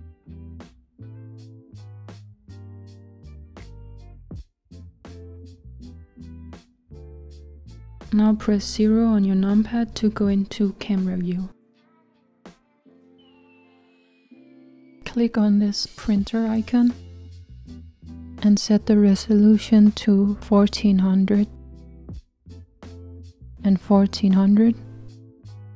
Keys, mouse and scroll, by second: 1.5 shift+right click, 3.5 click, 4.2-5.8 middle drag, 5.8 KP_0, 15.3 click, 18.0-25.5 drag, 25.5 KP_0.